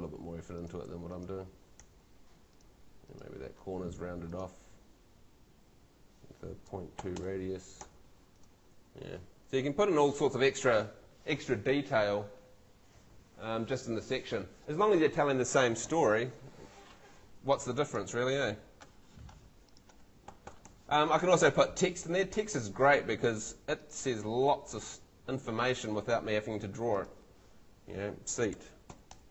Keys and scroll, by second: 1.8 shift+Escape, 6.5-7.5 typing, 7.8 Escape, 16.3 Escape, 20.5 Escape, 28.3-29.3 typing.